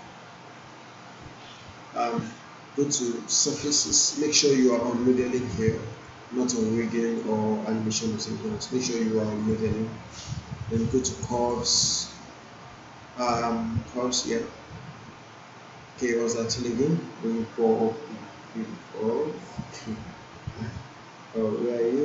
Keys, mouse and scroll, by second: 4.6 click, 9.7 click.